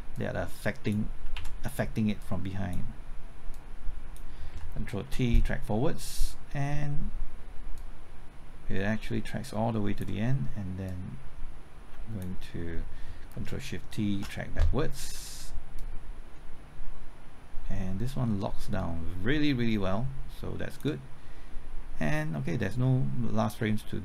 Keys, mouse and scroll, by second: 1.2 typing, 1.3 ctrl+z, 2.2 click, 4.6 typing, 5.0 ctrl+t, 7.7-12.2 drag, 14.1 ctrl+shift+t, 15.8-21.2 drag.